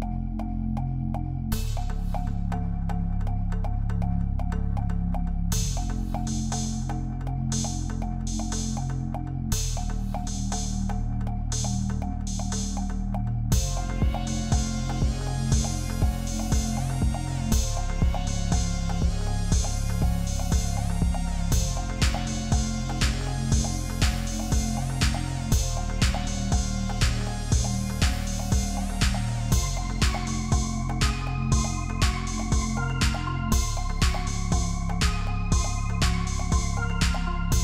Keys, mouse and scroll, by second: 5.4 ctrl+t, 5.7 right click, 6.8 shift+click, 7.8 ctrl+z, 8.2 shift+click, 9.5 shift+click, 10.6 Return, 13.0 ctrl+t, 13.4 shift+click, 15.7 Return, 18.5 space, 19.0 alt+click, 23.5 ctrl+t, 23.9 shift+click, 25.9 shift+Return, 26.7 ctrl+t, 27.2 double click, 28.7 Return, 32.5 Left, 32.6 Left, 32.7 Left, 32.8 Left, 33.4 ctrl+t, 33.9 shift+click, 35.1 shift+click, 37.2 Return.